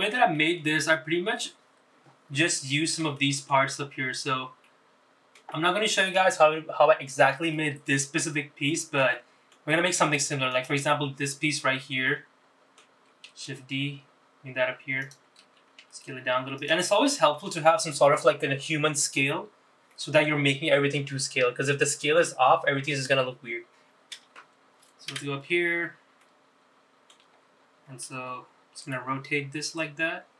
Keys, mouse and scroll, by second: 0.4 KP_Decimal, 1.1-1.5 scroll down 2, 1.5 middle click, 3.7 middle click, 4.3 shift+middle click, 4.8-5.8 scroll up 3, 5.8 middle click, 6.7 shift+middle click, 8.7 middle click, 9.8 middle click, 10.3 shift+middle click, 10.9 shift+middle click, 11.7 click, 12.3-13.1 scroll down 5, 13.1 middle click, 15.1 shift+d, 16.9 s, 18.0 shift+middle click, 21.1 middle click, 26.3 KP_Decimal, 26.9-27.2 scroll down 3, 27.3 middle click, 28.5-29.3 scroll up 4, 29.9 r.